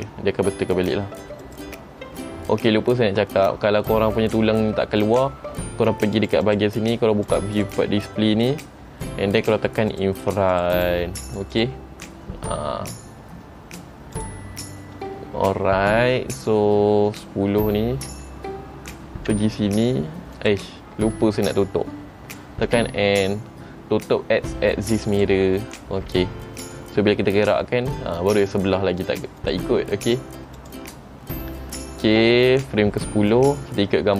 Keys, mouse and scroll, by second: 1.6 click, 6.3 click, 6.6 click, 7.4 click, 7.7 click, 8.9-10.1 scroll down 1, 10.1 click, 10.1-10.4 scroll down 2, 10.4 click, 10.7 click, 10.9 click, 11.4 click, 11.7 click, 14.3 click, 17.8-18.3 scroll up 1, 18.3-18.9 scroll down 1, 19.5 r, 21.3 middle click, 22.8 n, 25.3 click, 26.2 n, 27.4 r, 30.7 click, 31.4-32.3 scroll down 1, 33.6 scroll up 1.